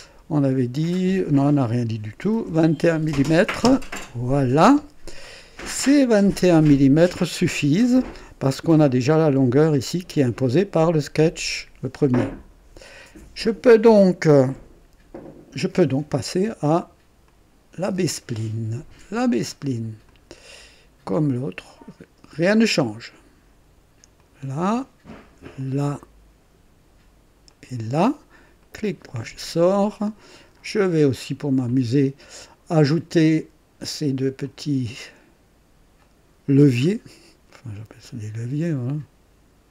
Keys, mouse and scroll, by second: 2.1 KP_2, 2.4 KP_1, 3.6 KP_Enter, 17.2 click, 20.0 click, 22.3 click, 24.1 click, 25.5 click, 27.4 click, 28.6 right click, 33.2 click, 34.4 click, 35.9 click, 38.0 click.